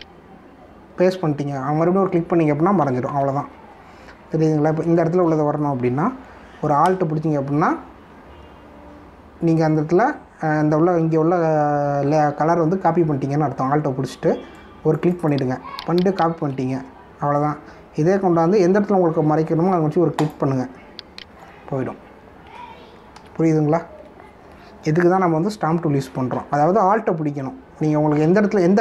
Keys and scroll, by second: 4.0 ctrl+z, 24.1 ctrl+z.